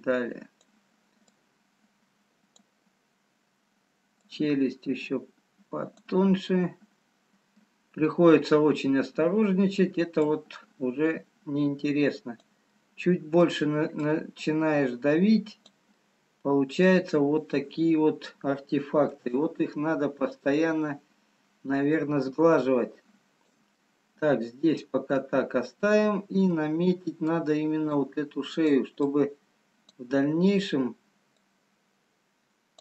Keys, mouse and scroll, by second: 4.1 click, 6.5 middle click, 10.3 click, 12.8 middle click, 14.9 click, 16.0 middle click, 17.9 scroll up 2, 19.0-19.5 scroll up 1, 19.7 shift+click, 23.7 middle click, 25.8-26.7 scroll down 1, 26.7 scroll down 1, 28.0 click, 29.3 click.